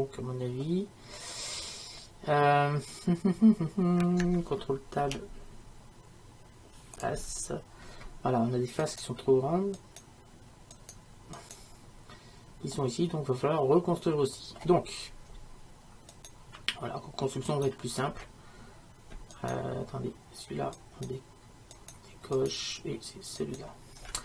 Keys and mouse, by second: 5.1 ctrl+Tab, 8.9-24.2 right drag.